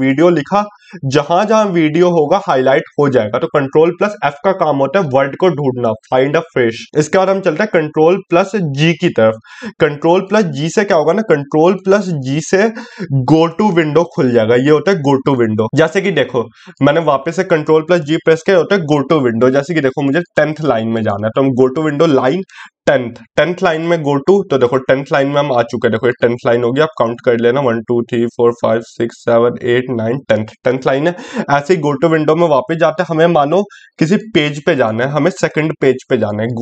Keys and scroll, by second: 7.2 ctrl+g.